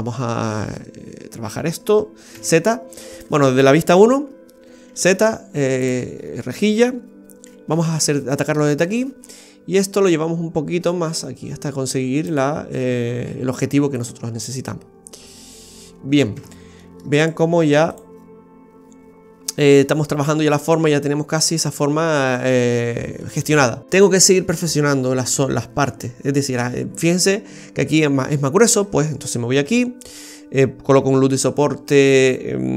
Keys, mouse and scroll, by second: 0.3 middle click, 2.3 z, 3.8 KP_1, 4.9 z, 7.7 b, 10.1 click, 13.2 z, 15.3 middle click, 16.3 Tab, 16.8 middle click, 17.2 right click, 17.9 click, 19.5-19.8 scroll down 1, 19.8 middle click, 28.5-29.5 scroll up 4, 29.6 Tab.